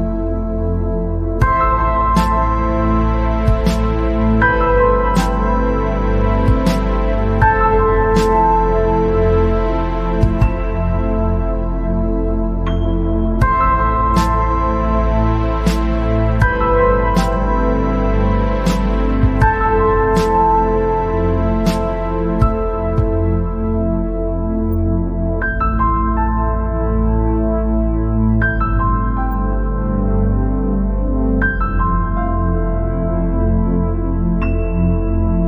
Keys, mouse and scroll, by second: 0.8 click, 1.3 scroll down 1, 1.4 middle click, 2.0 click, 2.4 scroll up 1, 2.7 scroll down 1, 2.8 middle click, 3.7-5.4 drag, 5.5 scroll up 1, 5.9 scroll down 1, 6.0 middle click, 6.7-7.4 scroll up 1, 7.8-8.7 scroll up 1, 8.9 scroll down 2, 9.1 middle click, 10.1 scroll up 2, 10.6 click, 12.9-13.9 drag, 14.9 alt+click, 16.2 alt+click, 17.3 click, 18.4 alt+click, 18.9 scroll down 2, 19.3-20.3 scroll up 4, 20.3-20.7 scroll down 1, 20.7 scroll up 1, 22.2 ctrl+b.